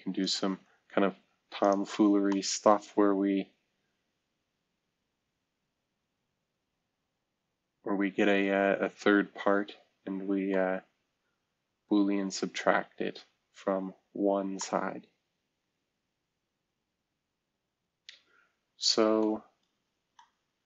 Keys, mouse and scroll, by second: 0.4 space, 2.0-3.3 scroll down 1, 3.3-3.8 scroll down 1, 14.0-14.5 scroll down 1, 19.3-19.9 scroll down 2, 19.9-20.6 scroll up 2.